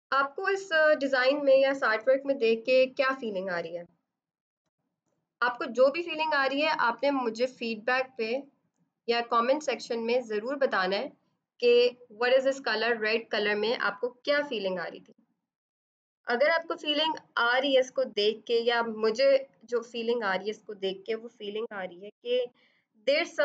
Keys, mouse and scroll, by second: 2.3 ctrl+=, 4.4 b, 6.9 F7, 8.0 click.